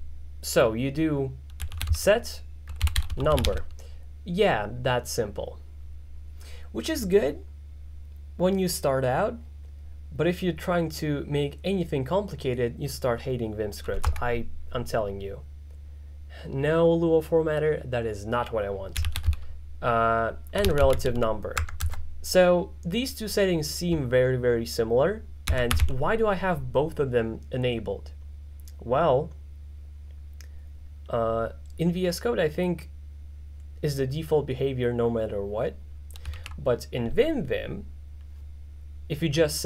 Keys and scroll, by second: 1.4-4.0 typing, 14.1 Return, 18.8-21.5 typing, 21.6 Tab, 25.3-26.4 typing, 36.5 alt+4.